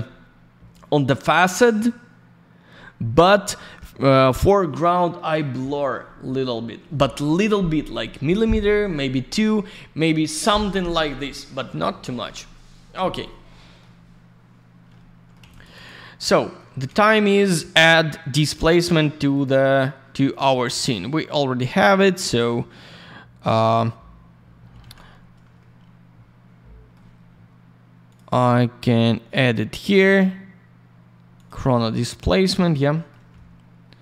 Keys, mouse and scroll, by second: 4.0 click, 4.2 click, 5.2-5.6 scroll up 1, 8.2-8.7 scroll down 1, 13.5 alt+middle click, 13.9 scroll down 1, 15.4 alt+я, 15.5 click, 15.6 click, 15.7 click, 15.8 double click, 15.9 middle click, 16.3 middle click, 16.7 middle click, 16.9 middle click, 17.0 click, 17.1 double click, 18.7 click, 19.3 click, 19.4 click, 22.5 scroll down 1, 23.5-23.9 scroll up 1, 24.8 alt+й, 25.5 alt+middle click, 28.1 click, 28.1 click, 31.3 click, 31.4 click, 32.9 middle click, 33.1 middle click.